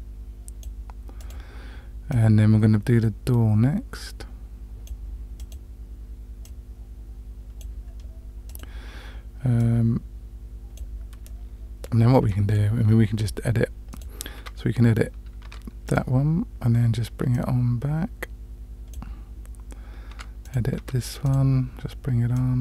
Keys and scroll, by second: 15.5 Tab, 20.1 Tab, 20.8 Tab.